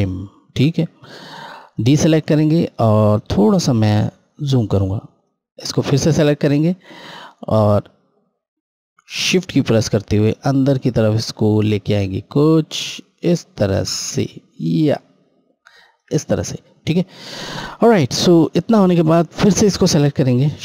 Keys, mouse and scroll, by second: 2.7-3.6 scroll up 1, 4.9 click, 6.1 scroll down 1, 6.8 scroll, 8.5 scroll down 1, 9.7 shift+click, 20.1 shift+Num_Lock.